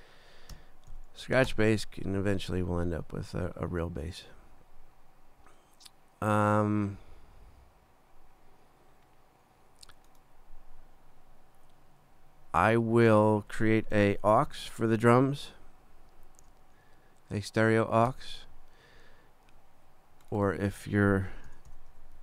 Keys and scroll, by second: 0.5 shift+Left, 0.9 shift+s, 1.5 shift+Return, 14.5 shift+super+n, 15.5 shift+super+Right, 16.0 super+Down, 18.1 Return, 21.2-22.2 typing.